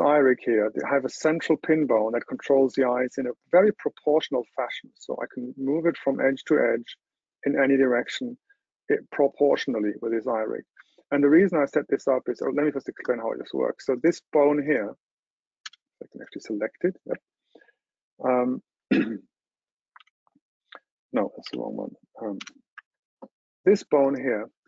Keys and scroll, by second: 20.3 super+], 21.6 super+], 22.5 super+k.